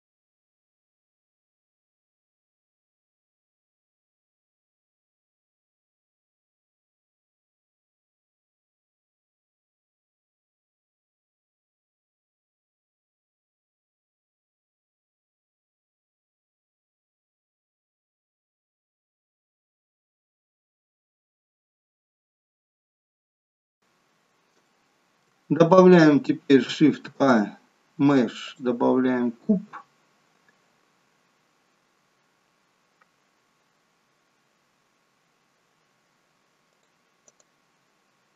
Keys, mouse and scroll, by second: 0.0 click, 0.2 shift+click, 0.3 shift+click, 0.5 shift+click, 0.8 f, 1.2 click, 1.6 shift+click, 1.7 shift+click, 1.9 shift+click, 2.2 f, 2.7 click, 2.8 shift+click, 3.0 shift+click, 3.1 shift+click, 3.4 f, 3.8 click, 3.9 click, 4.2 shift+click, 4.4 shift+click, 4.5 shift+click, 4.7 f, 5.1 shift+middle click, 5.5 click, 5.7 shift+click, 5.9 click, 6.2 shift+click, 6.4 f, 6.9 click, 7.1 shift+click, 7.2 shift+click, 7.4 shift+click, 7.6 f, 8.0 click, 8.2 shift+click, 8.4 shift+click, 8.5 shift+click, 8.9 f, 9.4 click, 9.7 shift+click, 9.9 shift+click, 10.1 shift+click, 10.4 f, 10.7 shift+middle click, 11.0 click, 11.2 shift+click, 11.4 click, 11.6 shift+click, 11.9 f, 12.3 click, 12.4 shift+click, 12.6 click, 12.8 shift+click, 13.3 f, 13.7 click, 13.8 shift+click, 14.1 click, 14.2 shift+click, 14.4 f, 14.7 shift+middle click, 15.1 click, 15.2 shift+click, 15.4 shift+click, 15.6 shift+click, 15.8 f, 16.2 click, 16.7 shift+click, 16.8 shift+click, 16.9 shift+click, 17.2 f, 17.6 click, 17.7 shift+click, 17.9 shift+click, 18.1 shift+click, 18.3 f, 18.8 click, 19.0 shift+click, 19.2 shift+click, 19.4 shift+click, 19.6 f, 20.0 click, 20.2 shift+click, 20.3 shift+click, 20.5 click, 20.8 f, 21.2 click, 21.4 shift+click, 21.6 shift+click, 22.1 f, 22.5 click, 22.6-23.5 scroll down 3, 22.8 middle click, 23.5 middle click, 23.6 shift+middle click, 23.8-24.2 scroll down 4, 23.8 KP_1, 24.6 shift+middle click, 26.9 shift+a, 29.3-29.9 scroll up 4, 36.6 click, 37.3 right click.